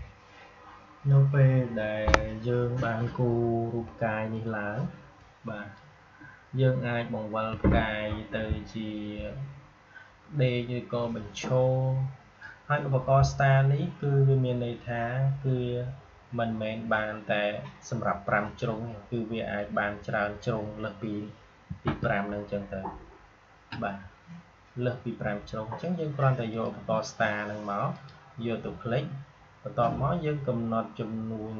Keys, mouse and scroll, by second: 0.0 click, 4.3-14.9 drag, 18.6-21.7 drag, 21.7 Delete, 26.5 click.